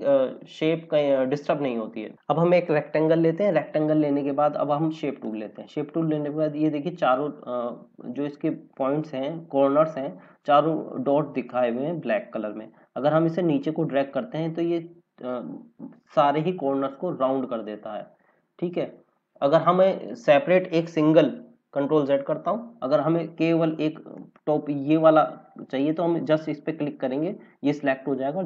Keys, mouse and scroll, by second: 2.1 click, 3.3 click, 11.4 click, 21.1 ctrl+z, 24.1 click, 26.3 click.